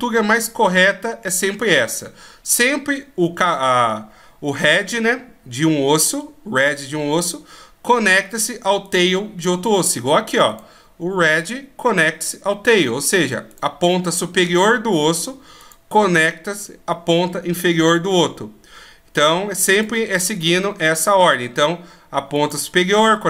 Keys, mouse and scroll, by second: 5.4 right click, 8.3 right click, 11.7 right click, 13.0 right click, 19.2 right click, 21.8 right click.